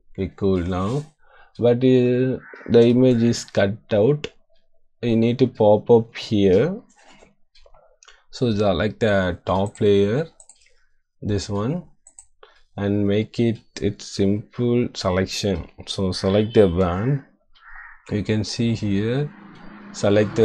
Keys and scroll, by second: 3.0 =, 16.8 w.